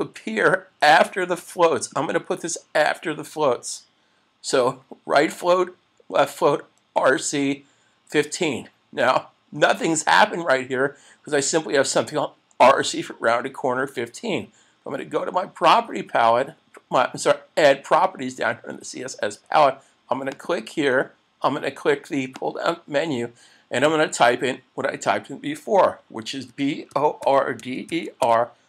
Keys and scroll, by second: 27.7 a.